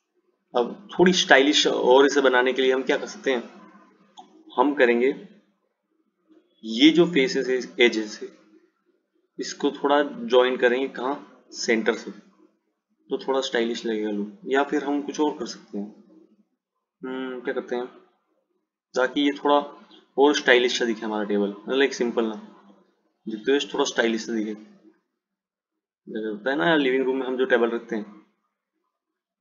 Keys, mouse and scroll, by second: 17.8 click.